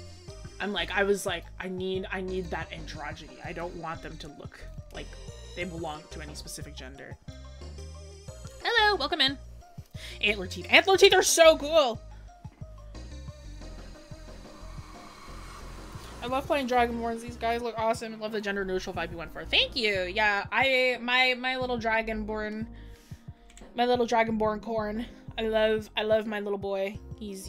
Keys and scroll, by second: 23.5-24.4 scroll.